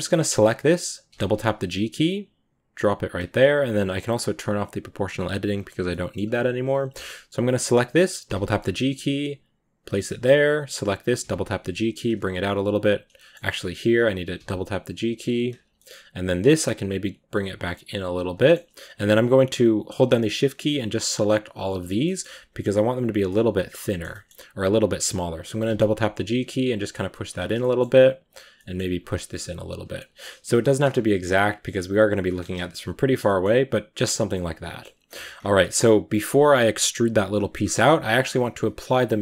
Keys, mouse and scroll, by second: 1.0 g, 5.4-5.7 drag, 5.7 shift+middle click, 6.1-7.0 scroll up 1, 7.0 scroll up 1, 7.2 right click, 8.1 g, 9.9 shift+middle click, 10.7 right click, 11.1 g, 12.0-12.5 scroll down 1, 12.5-12.9 scroll up 2, 13.0-13.6 shift+middle drag, 13.6 right click, 14.2 g, 15.6 shift+middle click, 16.1 right click, 16.4 g, 18.2 shift+middle click, 18.9-20.8 right drag, 21.2 shift+right click, 21.6 shift+right click, 21.7 scroll down 2, 21.9 shift+middle click, 22.6 shift+right click, 23.1-25.5 middle drag, 25.5 g, 27.3 scroll up 2, 27.5 shift+middle click, 28.1 right click, 28.3 scroll up 1, 28.4 middle click, 28.8 g, 30.0 g, 30.6 g, 32.2 scroll down 2, 32.4 a, 32.5-35.1 middle drag, 35.1-35.4 scroll up 1, 35.4 middle click, 36.0-37.2 scroll down 2, 39.0-39.2 drag.